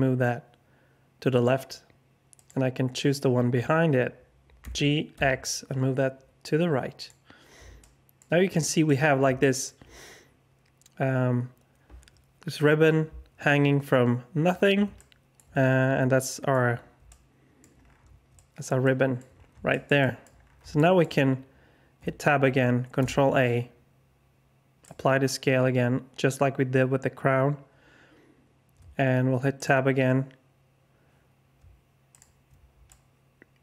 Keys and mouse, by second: 4.6 g, 7.8 alt+shift+click, 8.6 shift+click, 8.7 alt+shift+middle click, 9.4 shift+middle click, 14.9 alt+shift+middle click, 16.1 middle click, 16.2 alt+click, 17.1 alt+click, 18.3 alt+click, 18.8 click, 19.7 shift+middle click, 20.0 middle click, 20.7 alt+shift+middle drag, 21.9 Tab, 22.9 ctrl+a, 28.7 Tab, 32.8 middle click, 32.9-33.6 alt+drag.